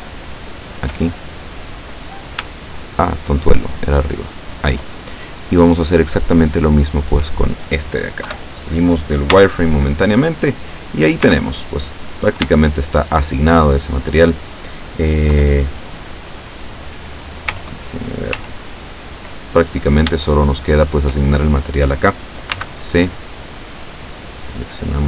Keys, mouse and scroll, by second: 0.5 shift+right click, 1.2-2.7 shift+middle drag, 2.9 shift+right click, 3.5 shift+right click, 3.9 shift+right click, 4.5 shift+right click, 7.0 click, 8.4 KP_7, 9.4 z, 10.0-10.4 scroll down 2, 10.8-11.2 scroll up 2, 11.3 z, 11.8-12.4 scroll down 4, 12.7-14.3 shift+middle drag, 15.4 KP_7, 17.6 z, 18.4 z, 19.7-20.2 scroll up 1, 20.3-21.3 shift+middle drag, 22.7 c, 23.8-25.0 drag.